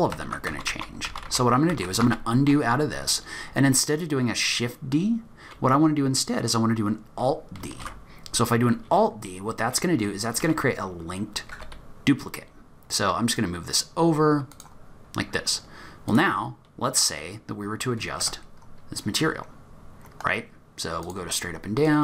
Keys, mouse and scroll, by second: 0.1 ctrl+z, 0.5 ctrl+z, 0.7 ctrl+z, 1.2 ctrl+z, 1.4 ctrl+z, 1.8 ctrl+z, 2.1 ctrl+z, 2.9 scroll down 2, 3.1-5.1 scroll up 2, 5.1-6.0 scroll up 1, 7.7 alt+d, 15.0 scroll down 3, 15.2-16.1 scroll up 2, 16.1 click, 18.2 Tab, 19.1-21.0 scroll up 2, 21.0 click, 21.0 scroll up 1, 21.8 click.